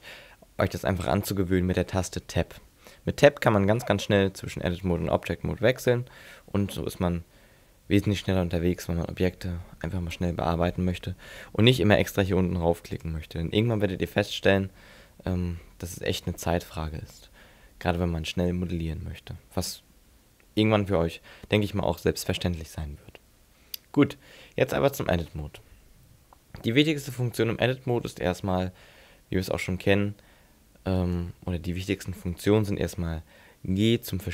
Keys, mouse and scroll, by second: 3.8 Tab, 4.4 Tab, 5.0 Tab, 13.0 click, 25.2 Tab, 31.0 right click.